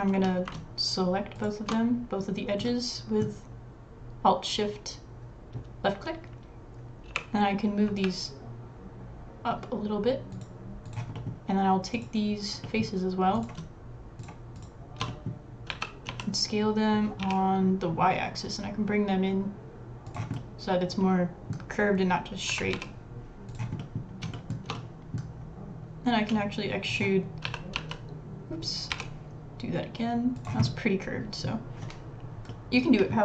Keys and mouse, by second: 1.4 alt+shift+click, 2.7 middle click, 7.1 g, 11.1 click, 12.6 middle click, 13.3 click, 15.1 middle click, 15.7 s, 20.3 middle click, 22.5 s, 23.1 r, 23.5 s, 24.3 shift+middle click, 24.7 middle click, 26.2 e, 27.4 s, 30.6 middle click, 31.3 middle click, 32.5 middle click.